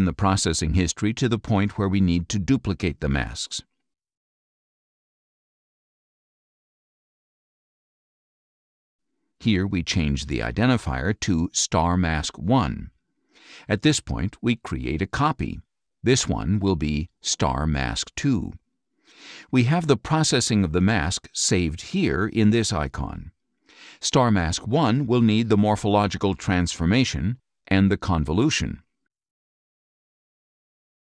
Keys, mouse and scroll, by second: 1.1 right click, 3.5 click, 6.2 click, 9.8 click, 10.9-12.8 typing, 13.0 Return, 14.0-15.2 drag, 16.3 click, 16.9 End, 17.1 BackSpace, 18.1 2, 19.2 Return, 23.9 click, 27.9-29.5 drag.